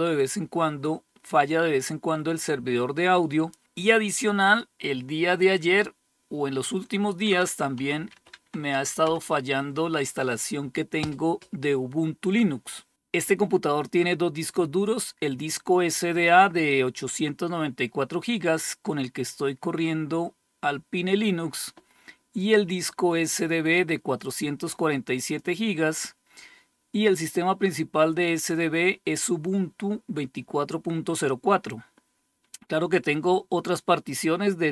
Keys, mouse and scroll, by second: 6.4-8.0 typing, 8.5 Return, 23.6-25.1 drag.